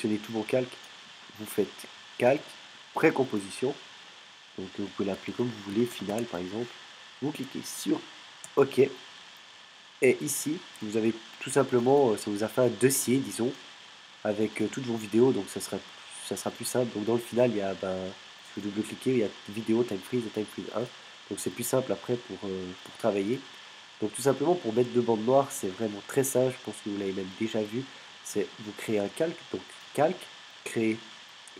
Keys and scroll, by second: 5.5-6.9 typing, 8.4 Return.